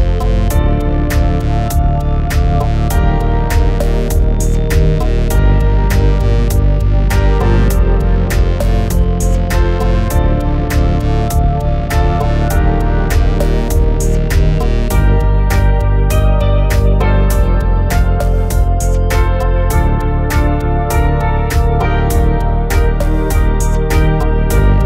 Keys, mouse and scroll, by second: 0.7 g, 1.5 click, 2.1 click, 2.4 g, 3.0 click, 3.5 shift+middle click, 5.9 g, 6.3 click, 6.7 click, 7.7 middle click, 9.5 KP_7, 12.0 shift+middle click, 14.1 x, 15.0 click, 15.5 x, 16.4 click, 17.2 click, 18.0 g, 19.0 click, 19.7 click, 20.0 g, 20.6 click, 21.1 click, 23.2 click.